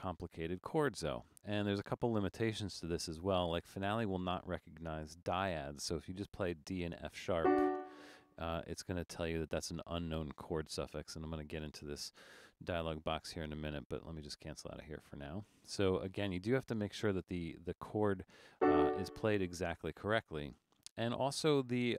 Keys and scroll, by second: 20.6 BackSpace.